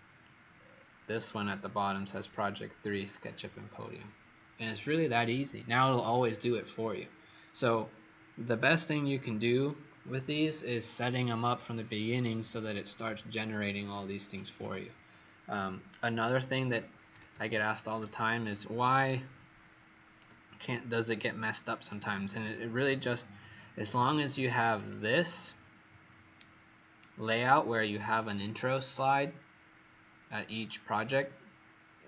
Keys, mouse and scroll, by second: 0.5-16.6 scroll down 20, 16.6 ctrl+-, 17.0 ctrl+-, 17.4 ctrl+-, 19.1 click, 23.7 click, 24.4 click, 26.4-32.0 alt+scroll down 2.